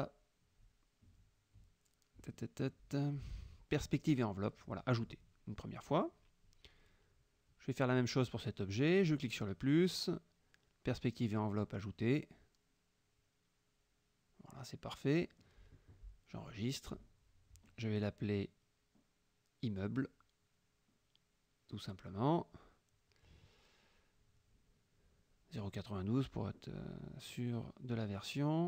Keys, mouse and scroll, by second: 0.2-0.9 scroll down 4, 2.3 scroll down 2, 4.6 click, 5.7 click, 8.8 click, 10.0 click, 11.4-12.0 drag, 12.7 click, 16.6 click, 19.1-22.4 typing, 23.7 KP_0, 25.8 KP_9, 25.9 KP_2, 27.8 click.